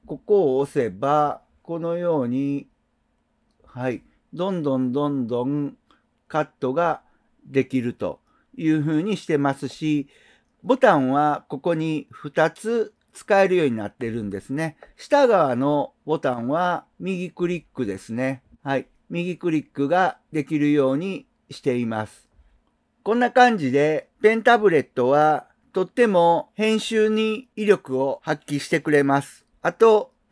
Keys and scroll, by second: 3.1 ctrl+alt+shift+?, 6.1 ctrl+alt+shift+?.